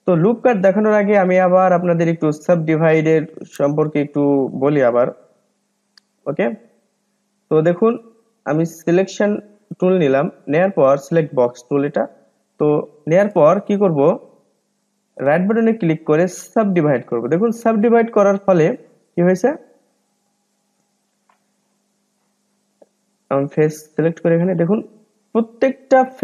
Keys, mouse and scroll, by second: 0.7-3.3 middle drag, 3.3-3.8 scroll up 3, 3.8-4.6 scroll down 2, 4.6-5.0 scroll down 2, 5.0-8.0 middle drag, 8.7-9.9 drag, 9.9 middle click, 10.6-11.0 scroll up 2, 12.2-12.6 scroll down 1, 12.6 middle click, 13.5-13.9 scroll up 2, 13.9-15.2 middle drag, 15.2-18.2 right drag, 18.7 scroll up 1, 18.9 click, 19.3-19.7 scroll down 1, 19.7-21.4 middle drag, 21.4 click, 21.8 click, 23.4 click, 24.9 click, 25.4 click, 25.9 click.